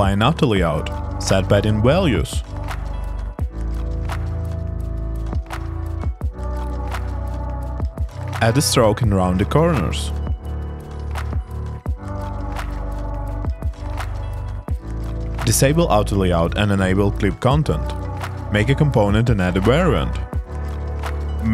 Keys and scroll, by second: 0.0-0.3 typing, 2.6 1, 3.0 0, 4.9 3, 5.2 0, 6.5 BackSpace, 6.8 Return, 10.4 super+v, 11.8 2, 13.1-14.0 typing.